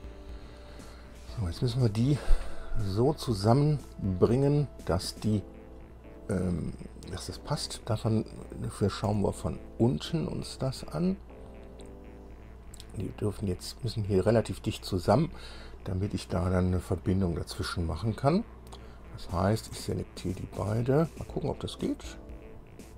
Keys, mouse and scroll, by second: 2.1-2.4 scroll up 2, 3.3 scroll down 2, 5.1-7.0 drag, 7.3 scroll down 2, 7.7 click, 9.3 KP_5, 10.7-11.1 scroll up 2, 11.3 scroll up 2, 11.9-12.3 scroll up 2, 19.7 click, 20.3 shift+click, 22.3 click.